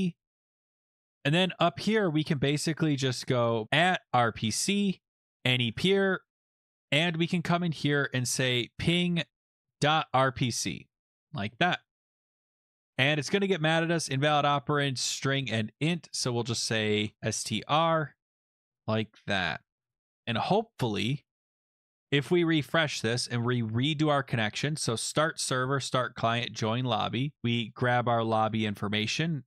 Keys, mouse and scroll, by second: 0.5 BackSpace, 0.5 BackSpace, 1.2 BackSpace, 1.7 Up, 3.4-6.4 typing, 5.3 Tab, 7.8-9.3 drag, 9.3-11.0 typing, 11.1 ctrl+s, 15.0 click, 16.2 click, 16.4-20.1 typing, 19.7 Left, 19.8 Right, 19.9 Right, 20.0 Right, 21.2 ctrl+s, 22.3 click, 22.8 ), 24.2 click, 25.2 click, 25.9 click, 26.3 click, 27.4 click, 27.6 click, 27.7 click, 28.4 ctrl+c, 28.7 alt+Tab, 29.3 click.